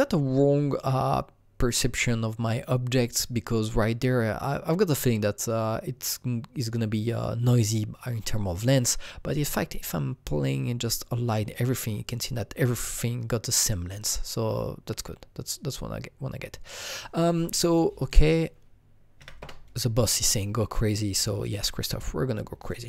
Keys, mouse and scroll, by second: 9.0 alt+Num_Lock, 9.0-18.0 alt+drag, 9.0-17.7 alt+right drag, 18.0-19.2 alt+drag, 19.2 KP_5, 19.4 KP_Enter, 22.7 KP_Enter, 22.7 click, 22.7 KP_5.